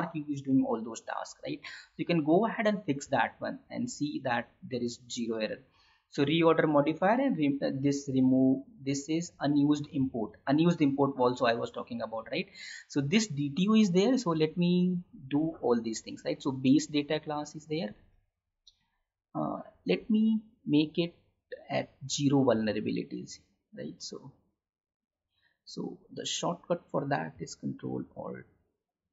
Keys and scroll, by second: 18.0 alt+Tab, 27.2 ctrl+alt+y.